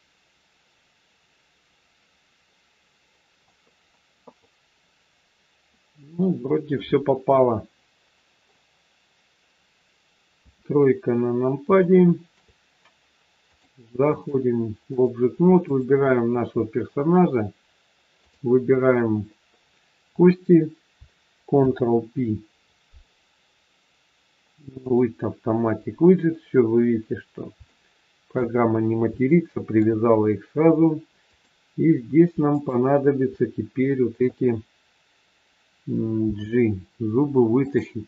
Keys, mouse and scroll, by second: 3.6 scroll down 2, 4.2 middle click, 10.4 KP_3, 11.7 shift+middle click, 13.4 click, 14.0 click, 18.1 shift+click, 18.3 shift+click, 21.5 ctrl+p, 27.6 shift+middle click, 28.6 scroll up 2, 29.4 shift+middle click, 30.1-30.4 scroll up 2, 31.2 click, 32.4 shift+click, 36.1 g.